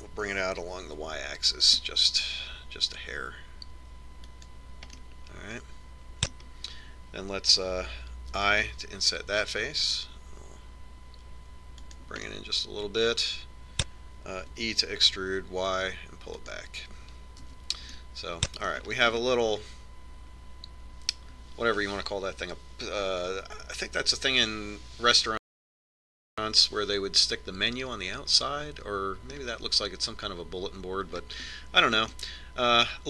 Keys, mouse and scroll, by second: 6.8-8.6 middle drag, 12.8 i, 14.2-16.6 middle drag, 16.6 e, 19.5 Tab, 19.9 middle click, 20.7 middle click, 21.1 middle click, 22.0 middle click, 22.9 middle click, 29.5-33.0 middle drag.